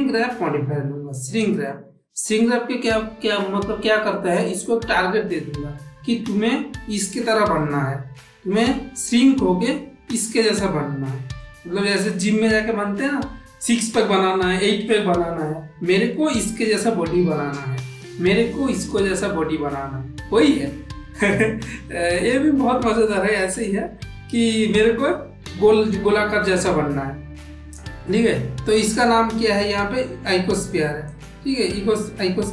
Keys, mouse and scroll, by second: 11.4 middle click, 22.1-23.5 middle drag.